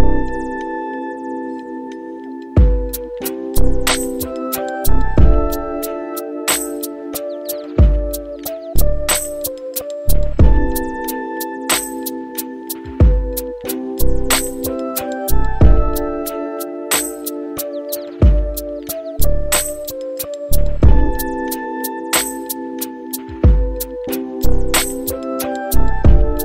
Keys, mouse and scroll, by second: 2.2 space, 8.9 click, 11.2 click, 12.6 shift+s, 18.6 click, 22.8 click, 24.1 shift+click.